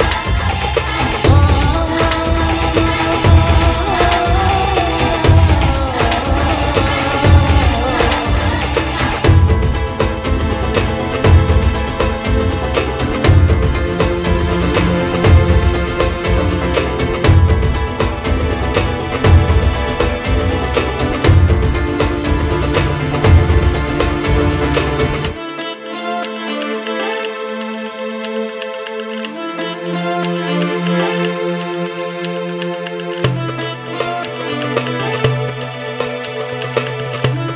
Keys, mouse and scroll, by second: 0.8 shift+click, 2.5 click, 3.0-3.4 scroll down 8, 3.4 click, 4.0 shift+d, 4.7 click, 5.4 KP_1, 5.7 z, 6.1 g, 7.9-8.4 drag, 8.4-8.7 scroll up 3, 8.7 h, 9.1 ctrl+z, 9.1 g, 9.9-11.1 middle drag, 10.4 g, 11.8 click, 12.5 click, 13.6 scroll down 4, 13.8-15.3 middle drag, 14.3-14.6 scroll down 5, 15.3-16.0 scroll up 3, 16.9 click, 17.0 middle click, 17.5 click, 19.5 shift+click, 21.6-24.1 drag, 22.3 ctrl+s, 23.8 ctrl+s, 24.1 scroll up 2, 24.2-25.2 middle drag, 25.2 scroll down 4, 25.4 g, 29.7 click, 32.3-34.3 drag, 35.3 scroll down 7, 35.5-37.5 middle drag.